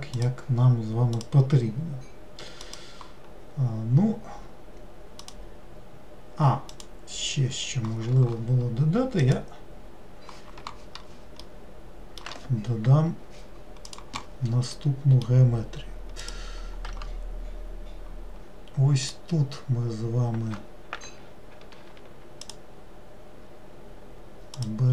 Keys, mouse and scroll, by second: 11.6-14.6 middle drag, 14.9-16.4 middle drag, 16.4 click, 19.2 click, 22.6 ctrl+shift+click, 24.7 ctrl+shift+click.